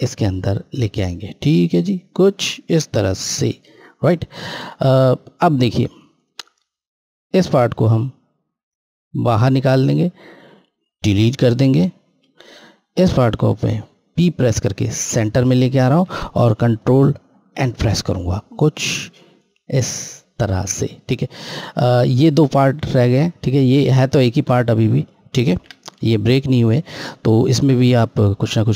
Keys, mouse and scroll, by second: 1.6 scroll up 1, 1.8-2.3 scroll, 2.9 scroll down 1, 4.6 scroll, 6.1 click, 12.1 Delete, 13.1 click, 14.9 p, 17.4 End, 18.7 click, 19.5 scroll, 21.1 click, 25.5 ctrl+z.